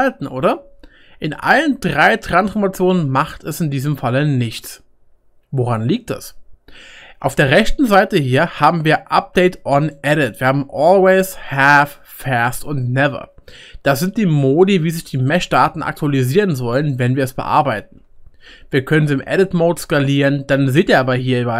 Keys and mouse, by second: 8.6-13.3 middle drag, 9.9-13.3 drag, 18.1 click, 18.1 middle click, 18.1 right click, 18.4 Tab, 19.2 s.